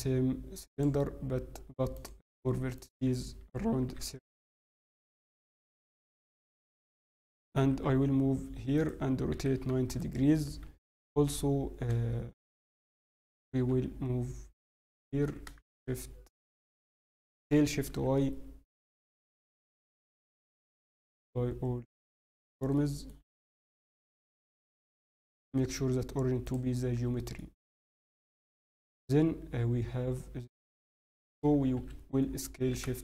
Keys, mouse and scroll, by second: 1.9 click, 4.5 click, 5.5 scroll, 7.6 scroll up 3, 7.6 g, 9.3 r, 10.6 KP_3, 11.3-11.6 scroll, 12.3 scroll down 3, 12.6 scroll, 13.7 scroll up 2, 13.7 g, 15.2 s, 17.3 s, 20.3 middle click, 20.9 ctrl+a, 22.7 middle click, 24.0 ctrl+alt+shift+c, 24.8 right click, 27.3 middle click, 28.6 scroll, 29.2 scroll, 29.4 scroll down 4, 30.1 middle click, 30.8 scroll, 31.1 middle click, 31.1 scroll down 1, 32.2 scroll, 32.6 scroll up 1, 32.6 s.